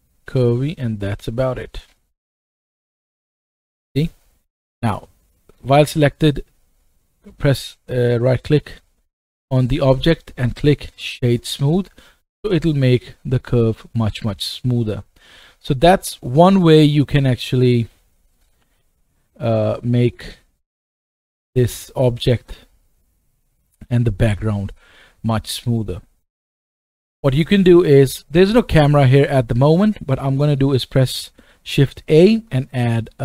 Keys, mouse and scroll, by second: 0.3 Tab, 0.7 click, 0.7 scroll down 2, 1.2 middle click, 2.9-5.5 middle drag, 2.9-5.2 right drag, 5.5-15.0 right drag, 14.5 middle click, 15.0 middle click, 15.3-15.7 right drag, 15.9 click, 16.4-18.3 scroll down 1, 18.3 click, 18.5 g, 19.9 middle click, 20.3-23.6 right drag, 21.6 click, 21.6 middle click, 25.6 shift+right click, 25.7-26.3 shift+middle drag, 26.2 right click, 26.3-29.4 right drag, 26.5 scroll down 2, 27.1-30.0 middle drag, 31.7 shift+a.